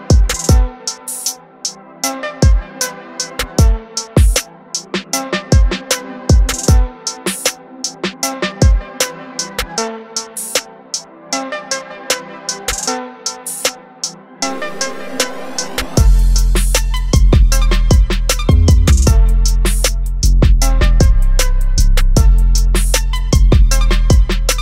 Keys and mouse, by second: 2.0 click, 6.4 click, 14.0 click, 15.9 click, 15.9 typing.